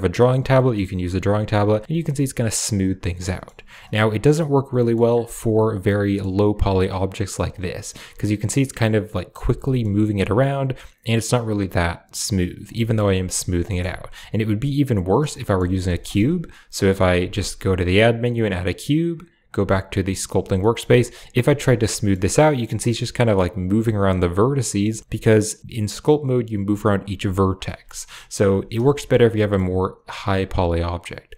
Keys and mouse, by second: 0.1 click, 0.4 middle click, 0.9 click, 1.7 middle click, 1.9 click, 3.1 middle click, 4.0 click, 4.6 middle click, 5.7 middle click, 7.6 middle click, 8.2 click, 9.5 middle click, 10.2 click, 12.7 middle click, 13.1 click, 13.5 middle click, 14.9 click, 15.0-15.7 typing, 15.3 middle click, 15.7 middle click, 16.1 click, 17.1 shift+a, 19.8 click, 20.5 click, 20.9 click, 21.7 middle click, 22.5 middle click, 23.4 click, 24.1 click, 24.5 middle click, 27.5 middle click, 28.8 shift+click, 28.8 shift+middle click, 29.2 middle click.